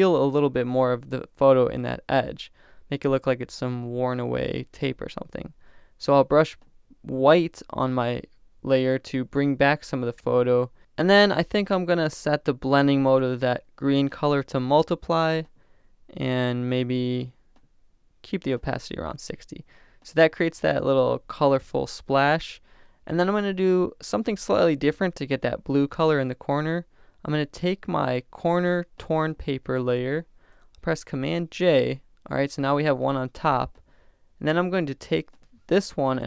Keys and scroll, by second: 31.6 super+j.